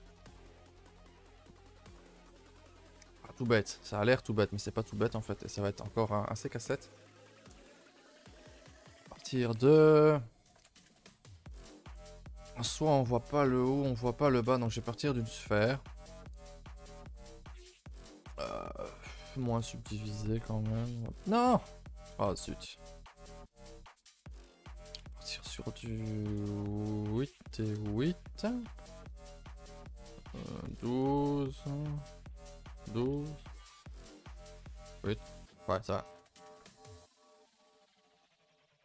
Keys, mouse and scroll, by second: 0.1 middle drag, 1.3-1.9 scroll up 2, 2.2-3.1 middle drag, 3.1 KP_0, 4.0-4.6 shift+middle drag, 4.6 scroll up 1, 5.1-7.0 shift+middle drag, 7.0 shift+right click, 8.4 shift+a, 14.4 shift+a, 18.5-20.7 drag, 21.8 ctrl+z, 22.3 x, 23.1 shift+a, 25.4-36.3 drag, 36.7 click, 37.0 right click, 37.8 s, 38.5 z.